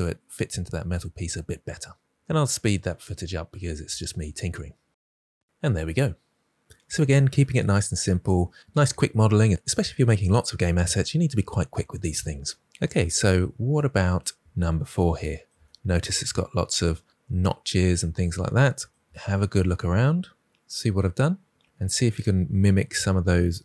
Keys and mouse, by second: 0.6-4.4 typing, 0.8 click, 2.4 click, 2.7 click, 5.0 Tab, 12.7 click, 17.9 middle click.